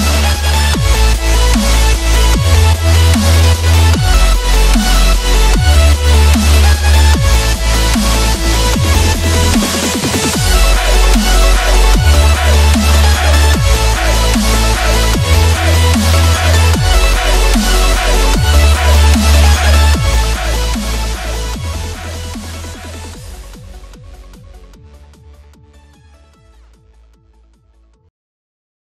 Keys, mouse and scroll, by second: 9.7 click, 11.3 space, 16.9 F9, 17.4 click, 20.5-21.8 drag, 25.0 F9, 25.5 click, 25.8 space, 26.0 click, 26.1-26.6 space, 27.1-27.7 click.